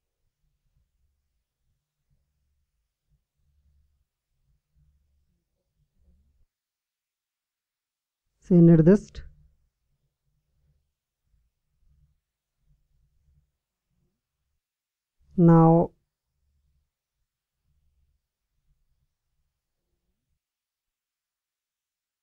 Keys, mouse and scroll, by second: 2.7-4.6 drag, 11.8-13.6 drag, 19.3 Tab.